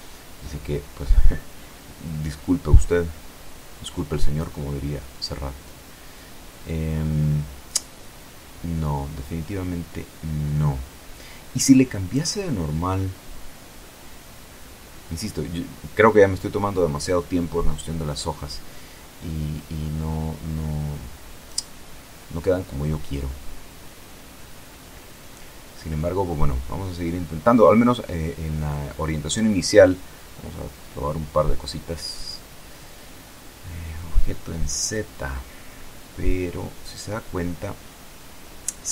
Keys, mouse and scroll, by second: 2.9-12.1 drag, 12.6 click, 14.6 click, 16.7-20.2 drag, 20.6 click, 25.4 click, 27.2-33.9 drag, 34.1-35.3 middle drag, 35.3 click, 35.4-35.9 scroll up 2, 36.2-37.7 shift+drag, 37.9-38.6 shift+scroll up 3.